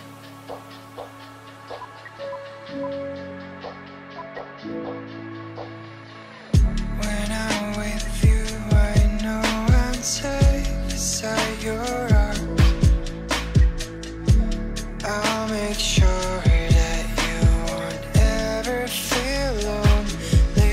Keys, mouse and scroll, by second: 1.8 ctrl+z, 2.9 shift+click, 4.1 shift+click, 7.8 F2, 11.1 double click, 13.4 Delete, 14.9 Delete, 17.1 double click, 17.7 Delete, 18.3-18.6 scroll down 1, 20.5 space.